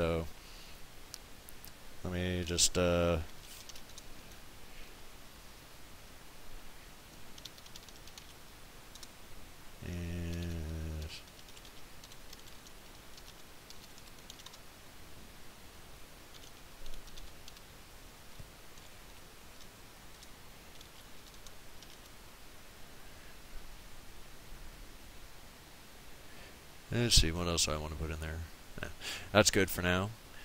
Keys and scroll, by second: 3.0-4.2 typing, 7.1-8.9 typing, 10.1-14.8 typing, 16.1-21.9 typing, 23.4 typing.